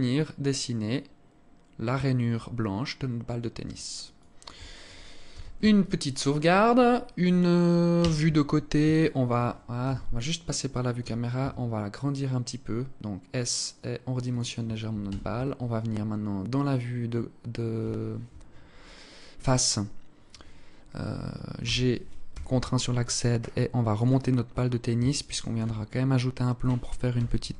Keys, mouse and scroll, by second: 3.8 alt+click, 4.9 ctrl+s, 7.6 KP_1, 8.6 alt+shift+click, 9.4 KP_0, 11.0 s, 14.6 KP_1, 15.4-15.7 scroll down 4, 21.2 g, 23.8-24.2 scroll up 7, 24.8 alt+shift+click, 24.8 scroll up 2, 25.4-25.7 scroll up 1, 26.7 g.